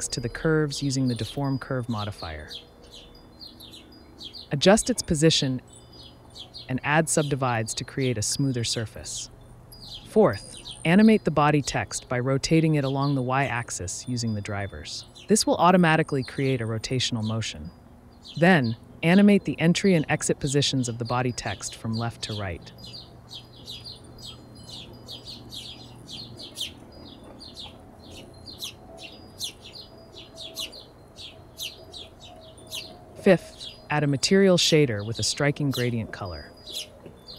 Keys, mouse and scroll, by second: 2.3 click, 4.6 n, 4.8-6.2 drag, 6.2 n, 6.2 KP_Decimal, 6.7 click, 8.3 right click, 8.5 Tab, 8.7 Tab, 9.4 a, 9.9 right click, 10.4 a, 11.2-14.0 drag, 14.2 space, 16.8 Left, 17.2-18.8 drag, 20.6 n, 21.5 right click, 22.6 Right, 22.7 right click, 23.8-25.5 drag, 26.4 click, 27.0-28.3 drag, 28.4 right click, 29.1 click, 31.0 s, 31.3 click, 33.3 space, 33.4-34.5 drag, 35.4 click, 36.0 shift+a.